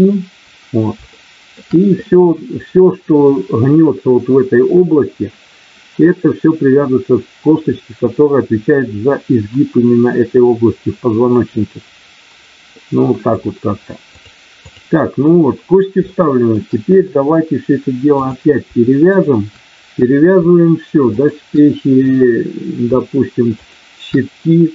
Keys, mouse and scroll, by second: 1.1 shift+middle click, 14.1 click, 16.1 shift+middle click, 18.0 click, 21.1 shift+click, 23.5 shift+click.